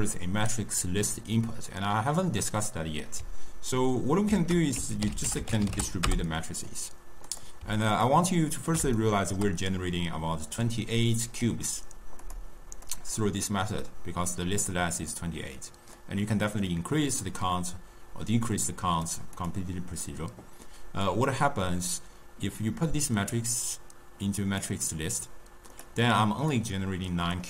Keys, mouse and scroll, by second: 2.5-4.2 middle drag, 4.2 ctrl+a, 7.9-10.4 ctrl+middle drag, 10.4 click, 12.1 click, 12.8 click, 15.9-19.0 drag, 19.2 click, 20.9-24.1 drag, 25.6 click, 26.4 click.